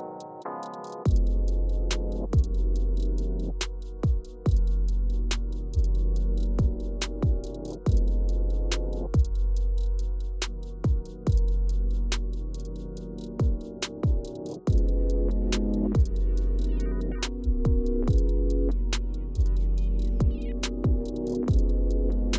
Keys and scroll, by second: 2.8 Up, 4.3 Down, 10.8 Return, 12.5 Up, 13.0 Up, 13.5 Down, 15.7 Down, 16.4 Up, 16.6 Up, 17.2 Down, 17.7 Return, 18.5 Return.